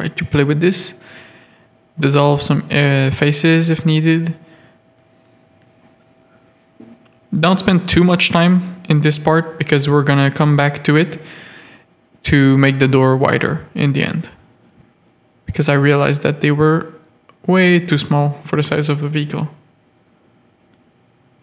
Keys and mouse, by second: 1.3 Tab, 2.0 z, 2.5 alt+a, 3.1 z, 4.8 z, 5.6 Tab, 6.1 z, 6.3 a, 6.7 click, 7.1 z, 7.5 g, 8.8 z, 9.1 a, 9.9 z, 10.3 g, 11.5 Tab, 12.2 Tab, 12.2 z, 12.5 a, 13.1 click, 14.3 click, 14.8 z, 15.4-16.7 drag, 16.9 z, 17.2 a, 17.4 click, 17.7 shift+click, 18.0 z, 18.5-19.7 drag, 20.2 click, 21.1 click.